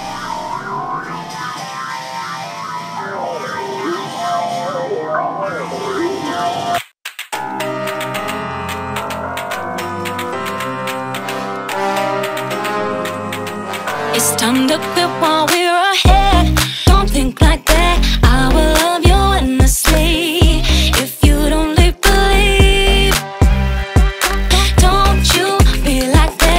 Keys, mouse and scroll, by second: 1.8-2.3 shift+middle drag, 2.3-2.8 scroll down 1, 2.8-4.0 middle drag, 4.0 scroll up 2, 4.1 scroll down 1, 4.2-4.6 scroll up 1, 4.6-5.2 scroll down 4, 5.2-10.0 middle drag, 10.0 click, 10.6 u, 16.8-19.4 drag, 19.4-20.6 middle drag, 20.6 scroll up 1, 20.8-21.4 scroll down 1, 21.4-25.0 shift+middle drag, 25.3-26.5 shift+middle drag.